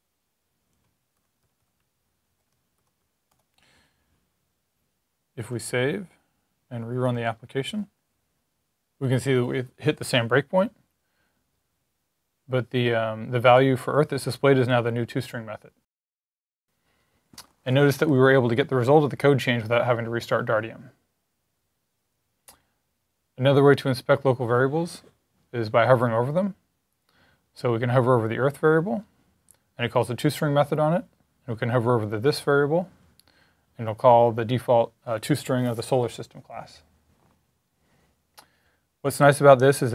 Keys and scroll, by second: 0.0-2.9 typing, 5.6 s.